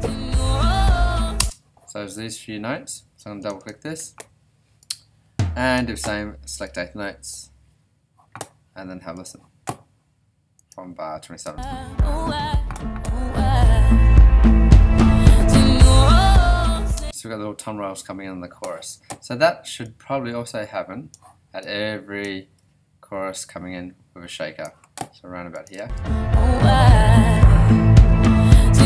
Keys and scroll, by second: 1.4 space, 11.4 space, 16.9 space, 25.8 alt+space.